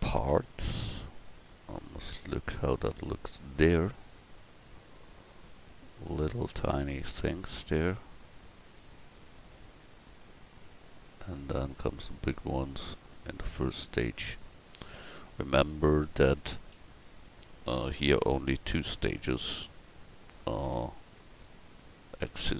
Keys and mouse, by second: 1.6 middle click, 11.4 middle click, 15.2 Tab, 16.7 l, 19.3 l, 20.6 x, 22.3 Tab.